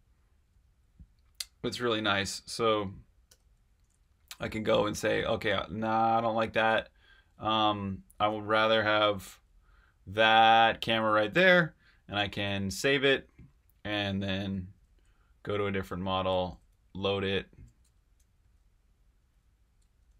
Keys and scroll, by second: 3.2 8, 7.2-7.6 space, 7.8 space, 8.0 space, 10.2-12.1 typing, 16.5 5, 18.4 8, 20.0 8.